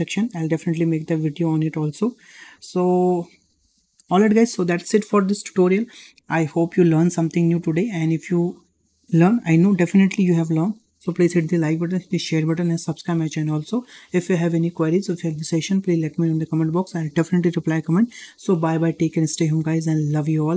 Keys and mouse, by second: 2.2 shift+middle drag, 2.6 middle click, 3.6 shift+middle click.